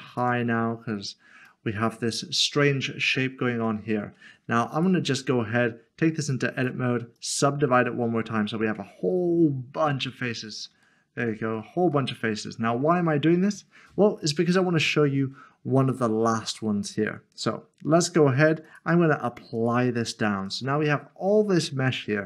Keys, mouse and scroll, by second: 1.0 scroll down 1, 1.7 middle click, 4.7 middle click, 6.6 right click, 7.2 click, 8.8 Tab, 9.8 scroll up 1, 10.4 scroll up 1, 10.5 middle click, 10.9 shift+middle click, 12.1 middle click, 18.7 middle click, 19.4 click, 20.9 scroll down 1, 21.7 scroll up 1.